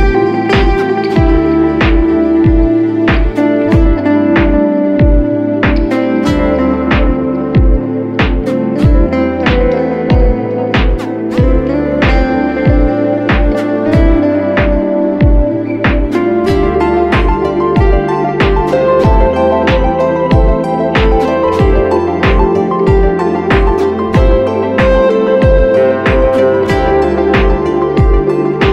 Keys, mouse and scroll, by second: 10.5 double click.